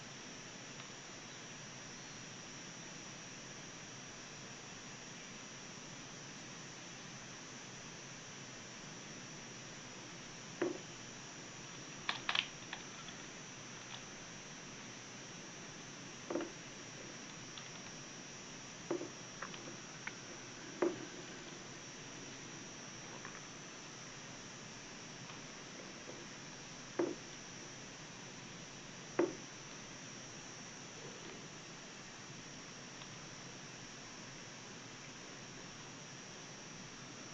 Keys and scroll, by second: 6.9 w, 10.7 w, 11.8 space, 14.9 w, 16.9 w, 21.6 w, 22.3 w, 23.0 w, 24.6 w, 25.3 w, 26.1 w, 26.9 w, 32.2 w, 33.3 space.